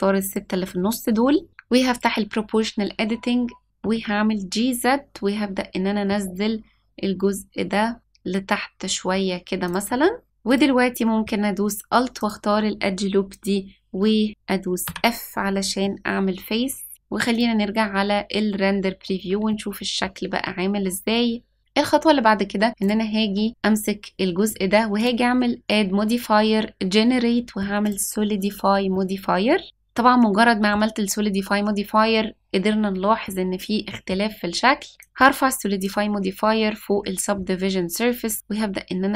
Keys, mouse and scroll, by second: 3.7 g, 10.2 middle click, 10.4-12.2 drag, 14.9 f, 15.8-16.9 middle drag, 17.5 click, 18.4-19.5 scroll down 1, 19.5 middle click, 21.6 click, 21.6 middle click, 22.8 click, 24.9-27.9 drag, 28.9-30.7 middle drag, 33.2-34.1 middle drag, 34.1-34.5 scroll down 1, 35.0-35.8 drag, 38.3-39.1 drag.